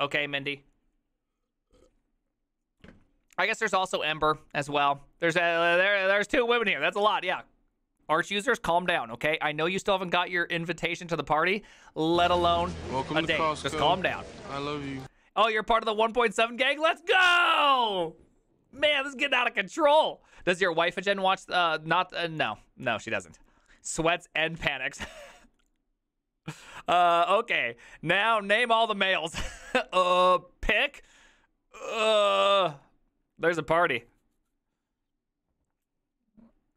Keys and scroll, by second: 32.8 alt+f.